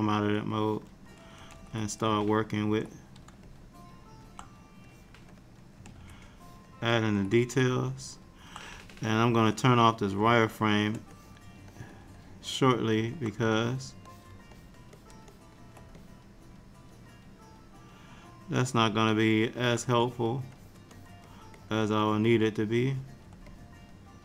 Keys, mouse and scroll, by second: 0.6 click, 1.6 ctrl+z, 2.2 ctrl+click, 2.3 ctrl+click, 3.6 middle click, 5.0 click, 5.4 click, 6.0 ctrl+z, 6.4 ctrl+click, 7.7 middle click, 9.7 click, 10.3 shift+click, 11.2 click, 11.8 click, 12.2 middle click, 13.6 ctrl+click, 14.2 ctrl+click, 14.6 ctrl+click, 15.0 ctrl+click, 15.4 ctrl+click, 16.1 middle click, 20.1 click, 20.6 click, 21.0 click, 21.3 click, 21.6 click, 22.0 click, 22.1 click, 22.7 click, 23.0 click, 23.6 middle click.